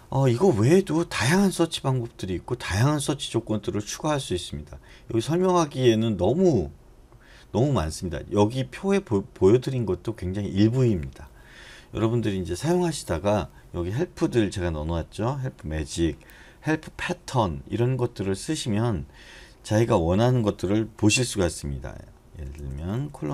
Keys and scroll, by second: 21.0-23.3 typing.